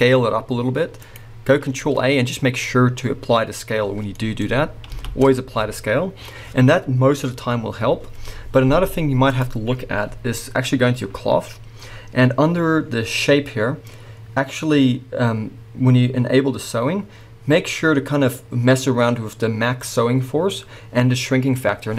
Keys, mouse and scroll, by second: 4.2 middle click, 5.1 ctrl+z, 9.1 middle click, 9.3 click, 10.7-20.4 scroll down 2.